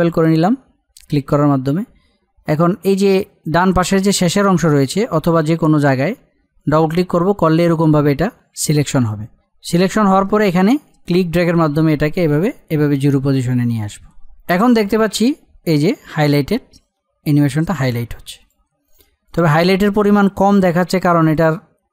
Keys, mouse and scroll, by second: 6.6 click, 11.0-18.8 drag.